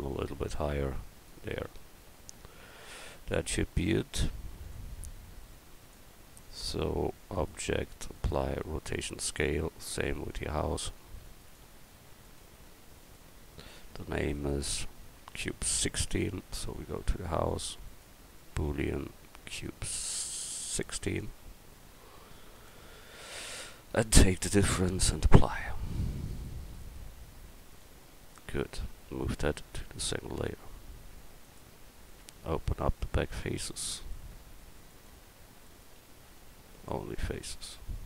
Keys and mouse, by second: 2.0 Tab, 14.4-18.8 right drag, 26.7 middle click, 27.8 middle click, 30.4 m, 32.1 right click, 32.4 Tab, 33.4-35.6 right drag, 36.1 x.